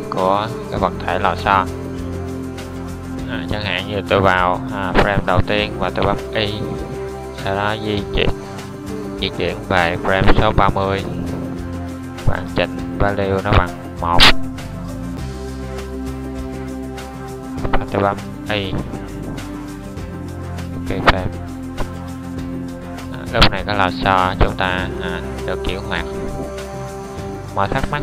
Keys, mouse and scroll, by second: 3.4 i, 6.6 middle click, 9.4-13.7 middle drag, 22.6 middle click, 25.4-28.0 middle drag.